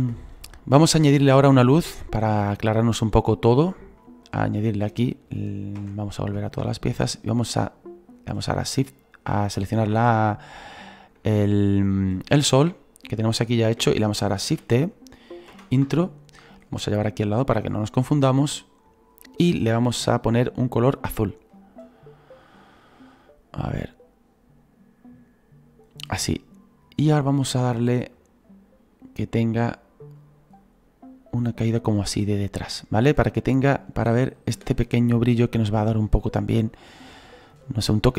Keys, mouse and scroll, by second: 3.1-5.8 drag, 5.8 /, 6.2-6.7 scroll down 2, 6.7-8.3 shift+middle drag, 8.3 right click, 9.2-14.5 middle drag, 14.5 shift+d, 16.6 click, 17.2-21.5 drag, 28.2-33.2 drag, 34.4 click, 34.6 space.